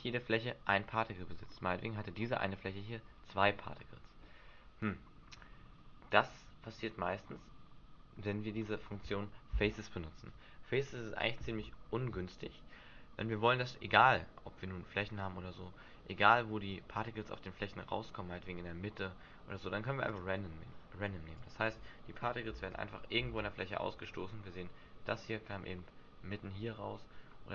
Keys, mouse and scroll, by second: 0.6 middle click, 1.6 scroll up 3, 2.1 scroll down 1, 3.1 scroll up 1, 4.2 middle click, 5.2-5.8 scroll down 7, 20.1 click, 21.4 click, 22.6 alt+a, 23.2 alt+a, 23.6 middle click, 25.4 middle click.